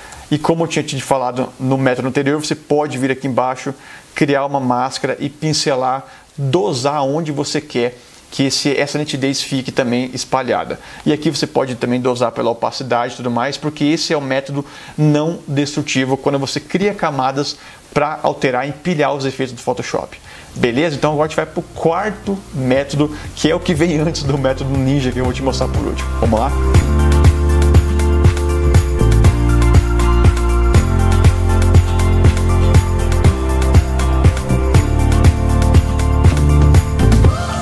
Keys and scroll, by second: 0.2 super+0.